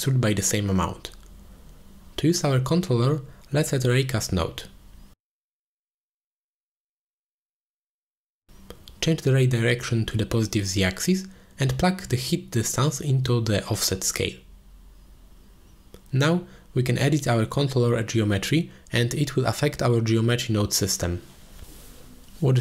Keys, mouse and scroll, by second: 0.4-1.7 drag, 2.1 click, 2.9-3.2 middle drag, 3.4 ctrl+s, 4.2 middle click, 5.2-6.2 drag, 6.7 click, 8.0 middle click, 10.1 click, 11.1 middle click, 13.8 click, 16.5-17.4 drag, 18.4-19.2 middle drag, 19.6-19.9 middle drag, 20.2 ctrl+space, 20.7 shift+middle drag, 21.2 middle click, 22.1 alt+h.